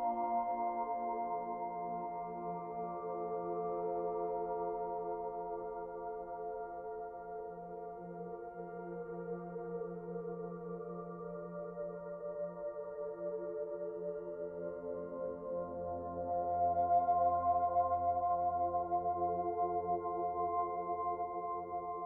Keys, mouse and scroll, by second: 0.8 middle click, 2.2 KP_7, 3.1 scroll down 2, 4.9 shift+d, 6.0 click, 8.9 scroll up 2, 9.4 shift+middle click, 9.8 middle click, 10.7-11.0 scroll up 2, 11.0 middle click, 11.3 middle click, 11.7 shift+middle click, 11.7-12.8 scroll up 3, 12.2 middle click, 12.8 middle click, 12.9 shift+middle click, 13.1 shift+middle click, 13.6 middle click, 14.5 click, 16.4 middle click, 17.1 shift+middle click, 18.2 middle click, 19.6-20.2 scroll down 1, 20.8 shift+d, 21.8 click.